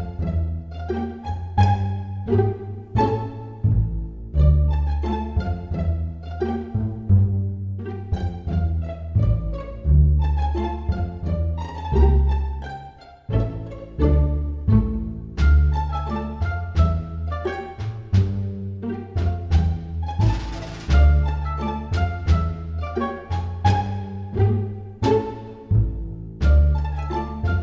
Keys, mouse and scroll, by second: 4.3 x, 6.3 click, 7.8 click, 8.9 shift+click, 9.8 shift+click, 12.6 s, 16.9 scroll down 4, 17.5 middle click, 19.6 s, 27.0 middle click.